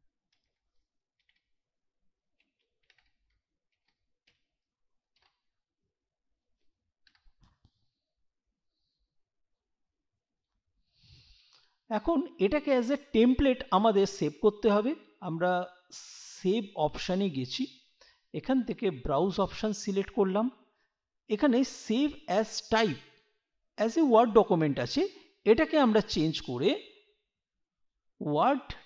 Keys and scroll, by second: 0.3 Return, 1.2-5.2 typing, 7.0 BackSpace.